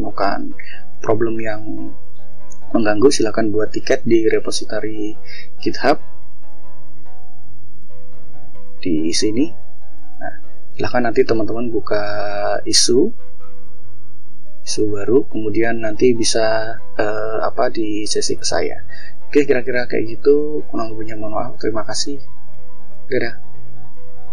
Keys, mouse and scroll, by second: 0.1 scroll down 1, 2.5 scroll up 1, 3.1 scroll up 2, 3.8 scroll down 2, 7.2 click, 8.6 click, 9.1 click, 10.9 click, 14.5 scroll down 1, 15.2 scroll down 1, 16.4 scroll up 1, 17.1-19.2 scroll down 2, 19.2 click, 21.1 click, 22.6 click.